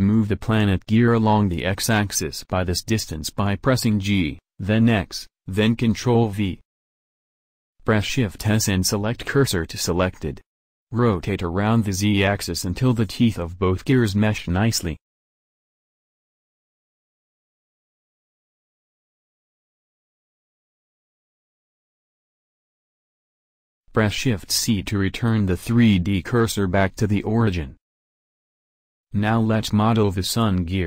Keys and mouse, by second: 0.9-3.1 right drag, 2.0 g, 8.2 shift+s, 11.0 r, 18.0 middle click, 18.8 middle click, 19.9-24.5 middle drag, 24.5 shift+c, 30.4 alt+Tab.